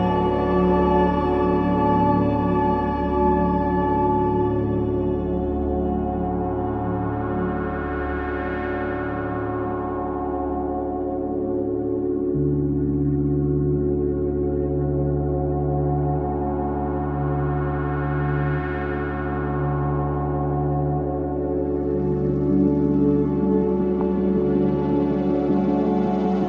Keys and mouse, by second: 1.2 typing, 1.9 click, 3.1-6.1 typing, 7.4-8.4 drag, 7.4 typing, 8.7-11.7 drag, 11.4-12.9 typing, 14.1 alt+click, 15.5-16.2 typing, 16.3 click, 16.8-20.9 ctrl+alt+drag, 20.9 typing, 22.5-24.0 alt+shift+drag.